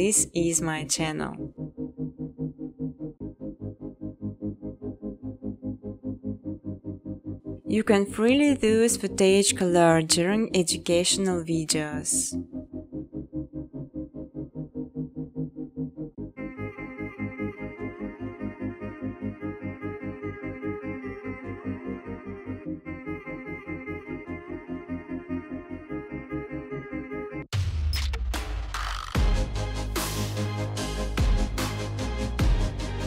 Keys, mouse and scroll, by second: 0.7 click, 1.1 click, 2.0 click, 2.5 right click, 4.4 click, 5.6-8.5 typing, 11.0 click, 11.8 click, 12.4-13.2 typing, 13.8 Tab, 14.3 typing, 15.9 Return, 17.9 click, 18.8 Return, 20.0-21.4 typing, 23.1 click, 24.4 click, 26.0-26.9 typing, 27.0 Tab, 28.0-28.8 typing, 31.4 click, 31.8 click.